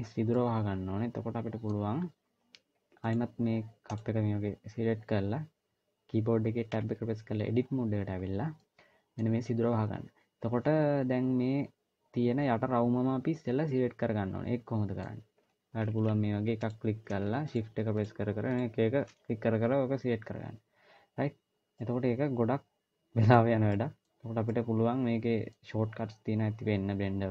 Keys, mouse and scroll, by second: 0.2 middle click, 0.2 scroll down 1, 2.9 click, 3.7 click, 6.6 Tab, 8.0-8.4 scroll up 1, 8.4 middle click, 10.3-10.9 scroll up 1, 13.5 middle click, 16.4 click, 17.2 shift+click, 21.6 middle click, 23.5 middle click.